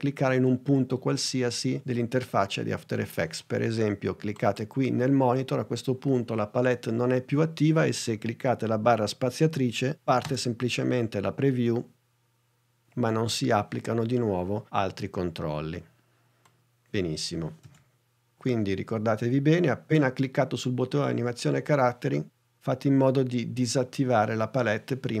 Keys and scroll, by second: 10.0 space, 17.7 super+z.